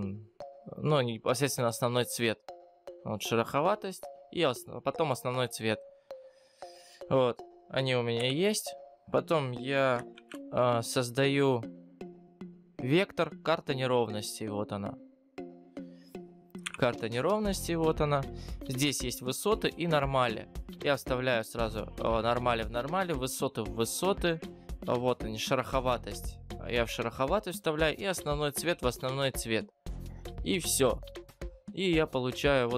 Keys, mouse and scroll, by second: 6.5 click, 8.3 Delete, 32.6-32.7 scroll up 14.